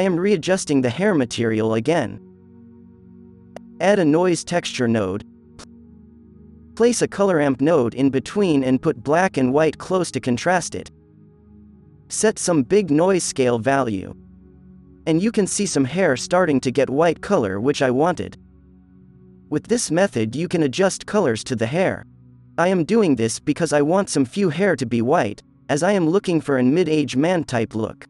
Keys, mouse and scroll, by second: 0.2 alt+a, 1.0 Delete, 1.8 shift+a, 6.3 shift+a, 9.7-10.7 drag, 11.1 click, 11.2 click, 11.4 click, 11.7 click, 12.6 KP_0, 15.4 click, 15.9 KP_0, 16.9 click, 18.1 click, 19.0 click, 20.9 drag, 22.0 Delete, 22.5 b, 23.0 g, 23.5 click, 23.9 alt+a.